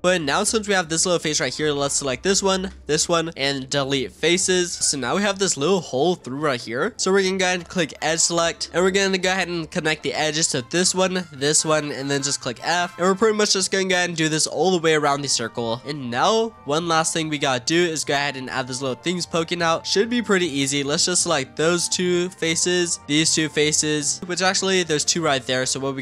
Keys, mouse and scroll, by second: 0.0 click, 0.3-0.7 scroll up 3, 0.7 click, 1.0-2.2 middle drag, 2.2 shift+click, 2.7 middle click, 3.3 x, 4.8-6.8 middle drag, 6.8-7.9 scroll up 1, 7.9 click, 8.6 middle click, 8.7-9.0 scroll up 1, 10.3 click, 11.2 shift+click, 11.9 middle click, 12.4 f, 12.6 middle click, 12.9 f, 13.2 click, 13.9 shift+click, 14.2 middle click, 14.6 f, 15.1 click, 15.7 shift+click, 15.8 scroll up 1, 15.8-18.5 middle drag, 18.5 click, 19.5-20.6 middle drag, 20.6 click, 21.2 shift+click, 21.7-23.0 middle drag, 23.0 shift+click, 23.5 middle click, 25.1 middle click.